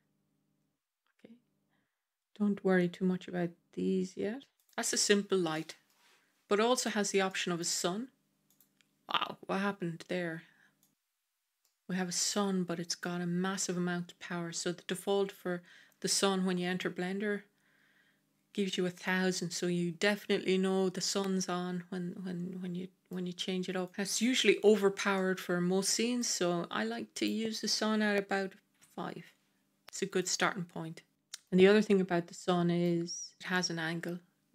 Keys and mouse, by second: 5.4 middle click, 7.1-7.5 middle drag, 8.4 click, 10.7 click, 11.5-12.9 middle drag, 19.2-23.0 middle drag, 23.8 click, 24.1 middle click, 25.0-26.1 middle drag, 27.0 click, 31.0 middle drag, 32.2-32.7 middle drag.